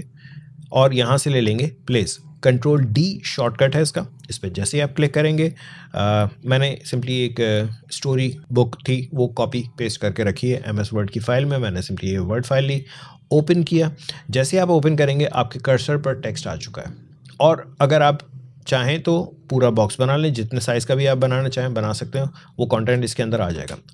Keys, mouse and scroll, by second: 15.4 click, 19.2-22.8 drag, 23.1 click, 23.4 ctrl+z.